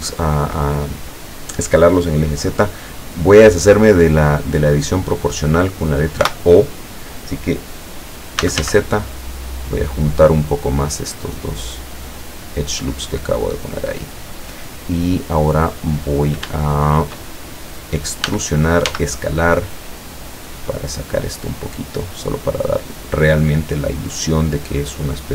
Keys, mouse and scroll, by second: 6.3 o, 8.2-9.1 typing, 13.2 click, 14.1 middle click, 15.0-15.3 scroll down 1, 15.3 middle click, 16.0-16.4 scroll up 1, 16.6 shift+middle click, 18.3 e, 21.9 click, 22.2-24.8 middle drag, 25.0 scroll down 1.